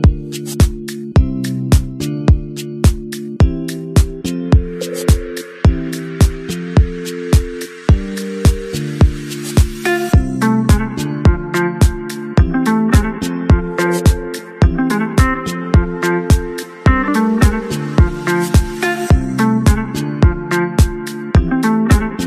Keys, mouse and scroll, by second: 0.9 ctrl+=, 1.1 space, 1.4 alt+right click, 1.8 double click, 1.9 space, 2.2 space, 2.5 alt+right click, 4.0 space, 4.5 space, 6.5 shift+click, 6.8 shift+click, 7.3 shift+click, 7.6 shift+click, 7.7 shift+click, 8.0 ctrl+-, 8.1 space, 8.4 space, 9.0 ctrl+-, 11.4 scroll down 1, 15.0 typing, 18.2-21.6 typing, 22.0-22.2 scroll down 1.